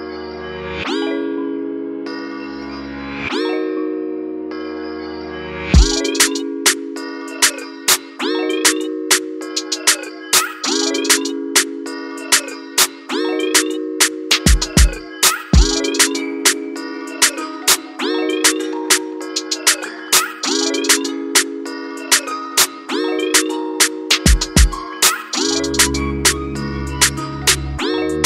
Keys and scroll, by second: 0.6-1.6 typing, 5.8 ctrl+-, 7.1 ctrl+=, 12.8 ctrl+z, 26.1 [, 26.2 [, 26.3 [.